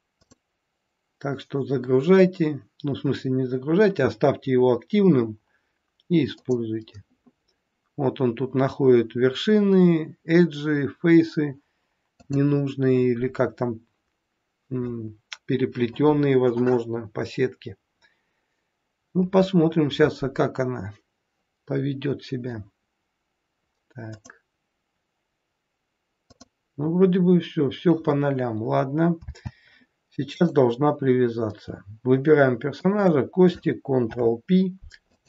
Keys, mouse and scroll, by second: 0.2 click, 6.4 click, 12.2 click, 24.2 click, 26.2 click, 29.2 n, 30.3 click, 32.8 shift+click, 34.1 ctrl+p.